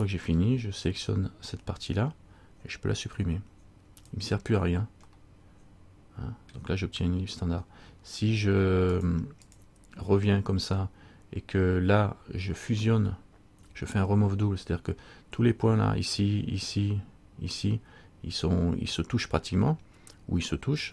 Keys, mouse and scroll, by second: 0.1 right click, 0.5 l, 1.1 l, 3.3 x, 5.3 middle click, 9.1 click, 9.6 click, 13.8 a.